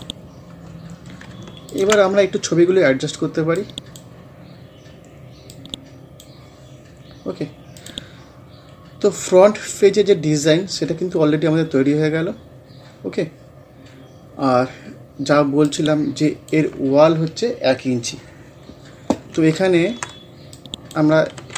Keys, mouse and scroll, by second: 0.6 scroll up 1, 1.3-1.7 ctrl+scroll up 1, 1.7-7.0 ctrl+drag, 7.0 scroll down 1, 7.8 click, 8.6 scroll down 1, 11.0 scroll up 1, 15.7-19.0 drag, 19.6-20.6 drag, 20.6 click, 21.4 ctrl+z.